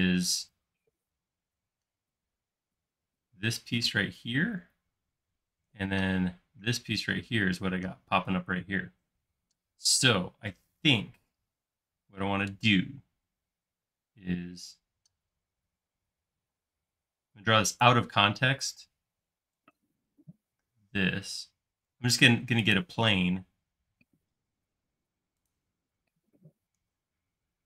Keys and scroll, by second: 12.8 i, 16.6 space, 17.2 l, 24.4 l.